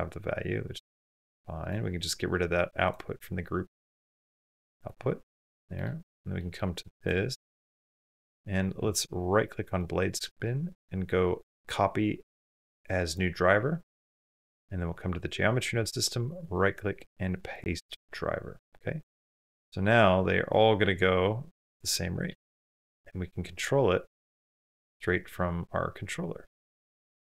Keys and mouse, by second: 1.4 click, 3.9 click, 5.2 click, 6.7 click, 7.8 click, 8.5 click, 16.1-17.2 right drag, 17.2 click, 19.1 space, 22.3 space, 24.9 click, 26.1-27.2 drag.